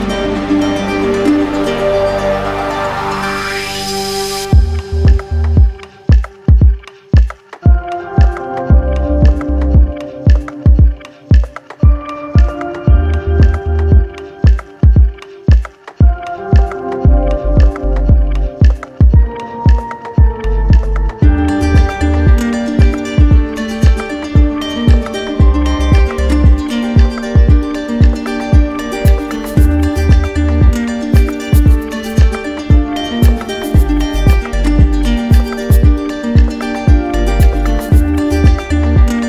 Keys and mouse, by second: 0.8-1.9 drag, 5.0-7.2 drag, 11.9-13.0 right drag, 13.5-15.4 right drag, 18.4 click, 20.4 click, 21.1 click, 22.7 click, 23.8-24.8 right drag, 25.9-27.0 drag, 27.4-28.5 drag, 31.5-32.6 drag, 34.4-35.5 drag, 36.4 right click, 37.7 right click.